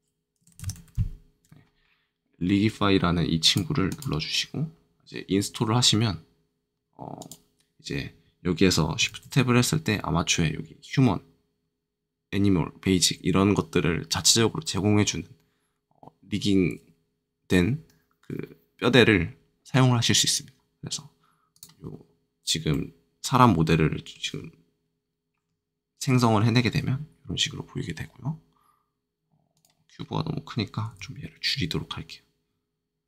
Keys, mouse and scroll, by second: 0.3 r, 0.5 i, 0.6 g, 0.7 i, 3.4 click, 3.8 click, 9.0 shift+a, 21.5 click, 22.7 middle click, 29.5 click, 30.9 s.